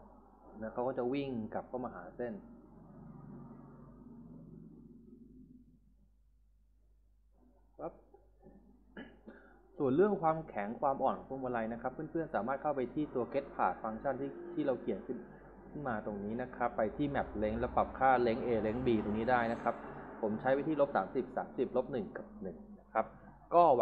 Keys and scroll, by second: 9.5 Escape.